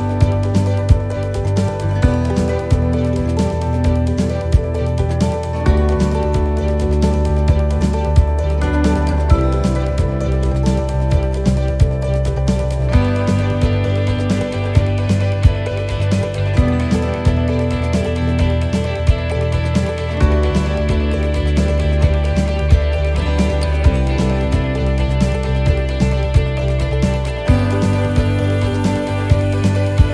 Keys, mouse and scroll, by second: 0.2 scroll up 2, 0.6 right click, 1.5 click, 2.6 middle click, 3.8 middle click, 4.4 shift+middle click, 4.4 shift+middle click, 5.1 right click, 6.0 c, 8.1 click, 9.2 middle click, 11.6 middle click, 12.2 right click, 13.1 c, 14.5 click, 16.8 right click, 17.6 c, 18.9 click, 21.1 right click, 21.9 c, 23.1 click, 24.4 middle click.